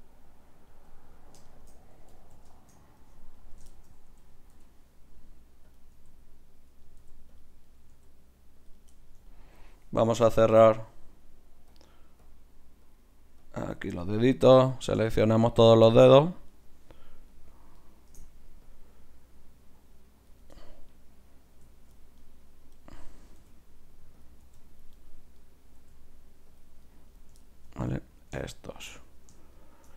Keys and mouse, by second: 4.1 KP_1, 4.6 g, 6.0 r, 7.0 g, 7.7-9.5 right drag, 7.9 r, 8.9 click, 9.5 middle click, 10.9-17.0 drag, 10.9 right click, 14.1 middle click, 14.7-20.4 right drag, 18.6-20.5 drag, 20.5-22.3 middle drag, 22.3-24.0 drag, 23.4 g, 24.5 g, 25.8 g, 26.8 click, 27.9-28.9 drag, 28.9-29.9 right drag.